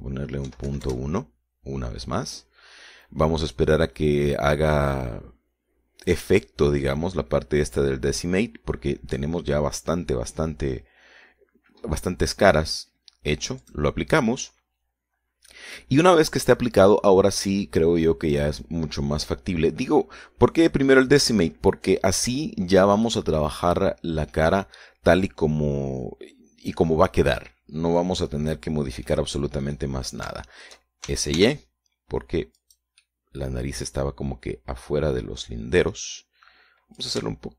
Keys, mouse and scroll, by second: 0.7 click, 1.7 KP_Decimal, 2.1 KP_Enter, 14.9 click, 24.3-30.9 middle drag, 30.9 click, 31.7 shift+middle click, 32.3 shift+s, 33.9 click, 34.3-37.3 middle drag.